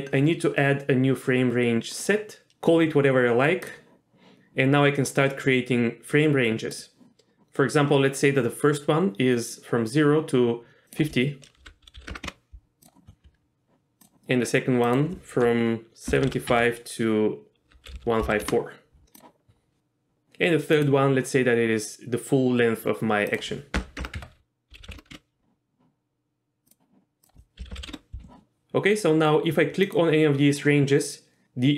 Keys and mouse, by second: 2.3-3.9 drag, 6.9-12.9 drag, 14.1-19.2 drag, 20.9-25.5 drag, 26.7-28.3 drag, 30.0 click.